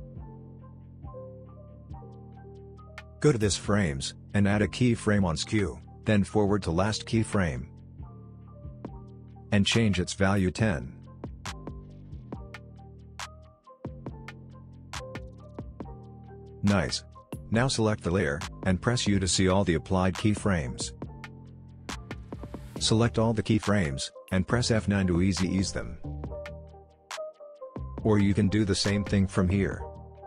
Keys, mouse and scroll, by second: 1.9-3.8 shift+drag, 12.5 Return, 14.3-16.8 drag, 19.1 u, 19.8-23.4 drag, 24.6 F9, 26.4-28.3 drag, 29.0 right click.